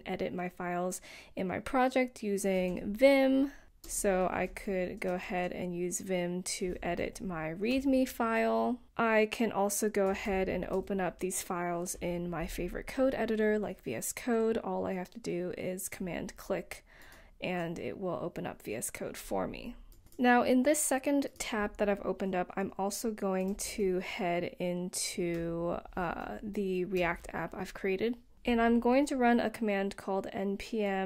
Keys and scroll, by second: 0.0-1.5 typing, 3.4 Tab, 4.0 Return, 6.6-7.3 typing, 7.4 Return, 8.6 typing, 9.8-12.3 typing, 13.6-14.3 typing, 20.0 BackSpace, 24.5-28.5 typing, 30.7-31.0 typing.